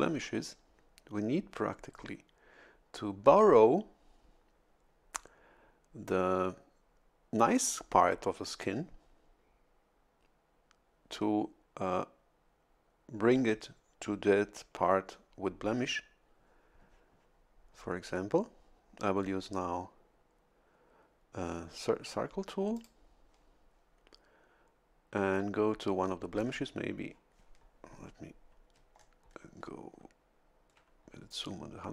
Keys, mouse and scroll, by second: 22.7 click, 28.8 a, 29.0-29.5 scroll up 2.